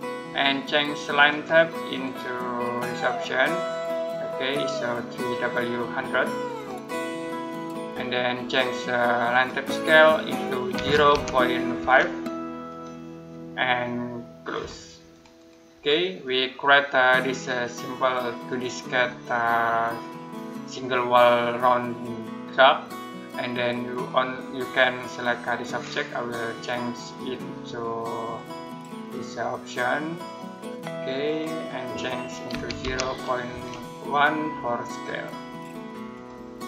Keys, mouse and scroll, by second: 6.3 click, 9.1 click, 10.6-12.1 typing, 12.5 click, 15.6 Escape, 16.1 middle click, 23.7 middle click, 25.5 right click, 26.9 click, 32.3-33.9 typing, 34.7 click.